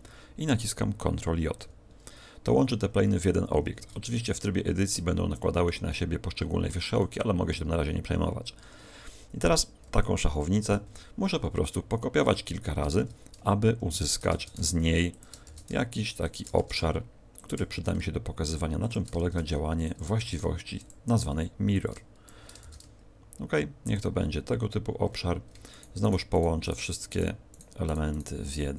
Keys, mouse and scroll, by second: 4.3 middle click, 8.5 Tab, 10.8 KP_7, 11.9-12.3 scroll down 4, 13.9 ctrl+click, 14.3 shift+d, 15.1 ctrl+click, 15.4 shift+d, 16.5 shift+d, 17.7 ctrl+click, 17.7 shift+d, 18.9 ctrl+click, 19.1 shift+d, 19.9 ctrl+click, 20.1 shift+d, 20.8 ctrl+click, 21.8 click, 22.5 shift+d, 23.9 ctrl+click, 25.7 shift+right click, 25.9 shift+right click, 26.3 shift+right click, 26.5 shift+right click, 27.1 shift+right click, 27.5 shift+right click, 27.8 shift+right click, 28.1 shift+right click.